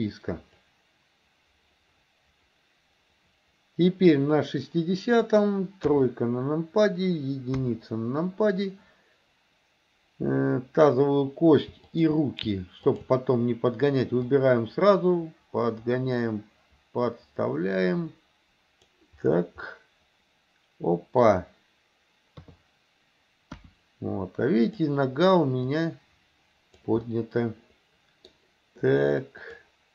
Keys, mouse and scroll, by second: 0.7-4.2 drag, 5.2 click, 5.9 KP_3, 7.6 KP_1, 11.9 shift+click, 12.9 shift+click, 14.2-19.0 drag, 19.7-21.3 middle drag, 22.4 KP_3, 23.6 KP_1, 24.6 click, 25.7-26.9 drag, 27.1-28.3 middle drag, 29.5 click.